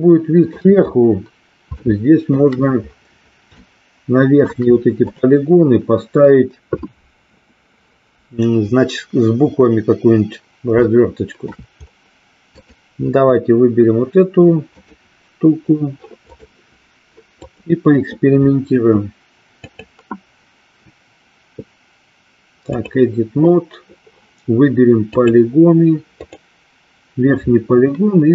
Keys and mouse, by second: 0.1 shift+middle click, 2.0 shift+middle click, 3.7 shift+middle click, 5.1 click, 11.0 shift+middle click, 12.6 click, 14.7 click, 16.2 click, 17.3 click, 19.6-23.0 drag, 26.2 click.